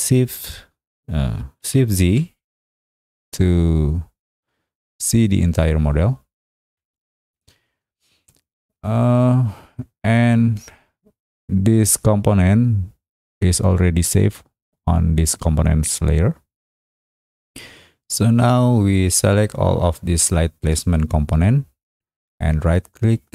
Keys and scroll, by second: 2.0 shift+z, 6.6 shift+z.